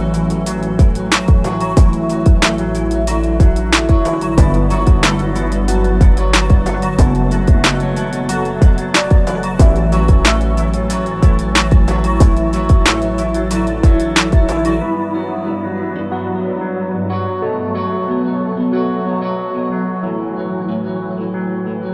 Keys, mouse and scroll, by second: 2.2 click, 3.0 alt+click, 9.4 alt+shift+click, 11.3 click, 17.6 shift+click, 20.1 click.